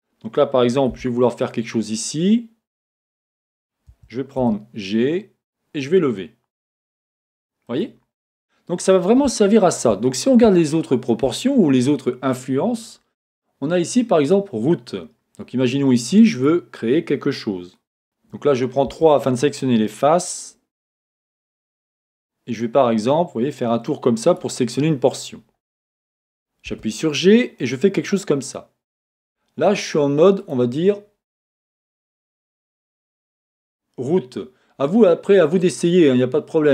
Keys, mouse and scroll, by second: 4.1 Escape, 4.5 g, 6.9 click, 7.3 middle click, 7.6 middle click, 7.8 click, 8.2-12.8 middle drag, 10.1-10.5 scroll down 2, 12.8-16.5 drag, 18.0 a, 18.9 3, 22.6-29.0 drag, 26.7 g, 34.4-36.7 drag.